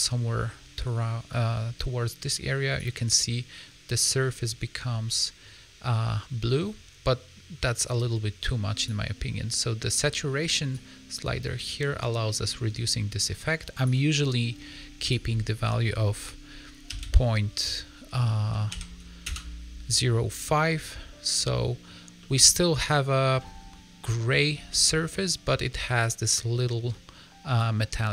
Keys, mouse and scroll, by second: 4.0 middle click, 4.4-5.0 scroll up 3, 5.0 middle click, 8.7 click, 20.4 middle click, 21.3 scroll down 2, 21.4 middle click, 22.1 middle click, 23.3 middle click, 24.6 middle click, 25.4 middle click, 25.7-26.8 scroll up 2, 26.8 middle click.